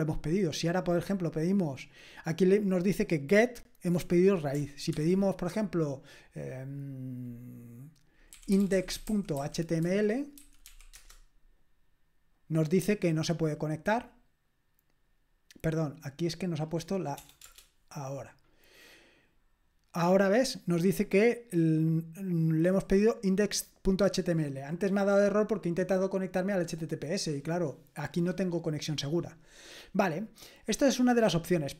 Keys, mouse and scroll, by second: 0.9 click, 1.4 click, 8.3-10.6 typing, 10.9 Return, 16.0-17.2 drag, 17.2 BackSpace, 17.4 Return, 22.6-24.5 drag, 30.9 click.